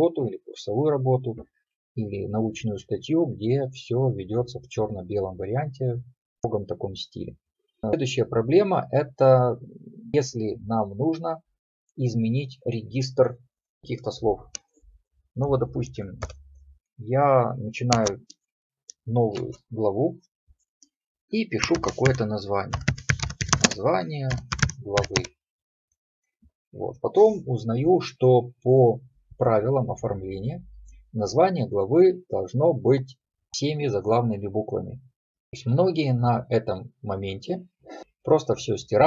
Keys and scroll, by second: 19.4 Escape.